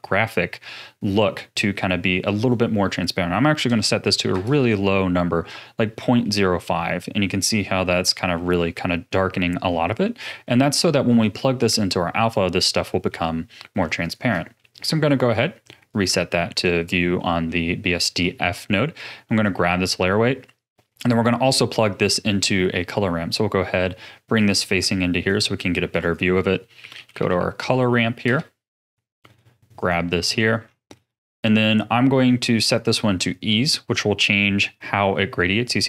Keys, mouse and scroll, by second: 0.8-2.3 middle drag, 2.3-5.4 drag, 6.2-9.2 middle drag, 9.2-9.7 scroll down 4, 9.7 middle click, 10.1-10.8 scroll down 9, 10.8-14.0 middle drag, 14.0 ctrl+shift+click, 14.6-15.8 middle drag, 15.8 click, 17.1 middle click, 17.8-18.9 scroll up 5, 18.9 click, 19.8-21.8 middle drag, 21.8-22.2 scroll down 1, 22.2-24.4 middle drag, 24.4 click, 25.7 shift+a, 30.2-30.9 scroll up 11, 30.9-31.4 middle drag, 31.4-32.0 scroll up 2, 32.0-32.6 middle drag, 32.6-35.7 drag.